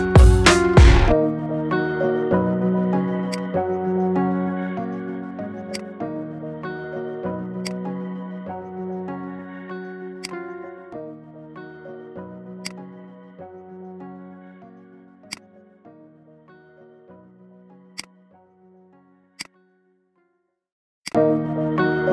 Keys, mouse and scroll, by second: 2.8-3.4 scroll down 3, 3.4 click, 4.5 g, 6.3-7.4 shift+middle drag, 7.4-7.8 scroll up 1, 7.8 click, 9.1 shift+a, 10.7 scroll down 3, 10.9-11.8 middle drag, 11.8 s, 13.1-13.4 scroll down 5, 13.4-14.3 middle drag, 14.3 KP_1, 14.6-15.5 scroll up 7, 15.5 click, 17.4 g, 18.4-18.8 scroll down 2, 18.8-19.2 middle drag, 19.5 click, 20.1 shift+a, 21.5-22.1 middle drag.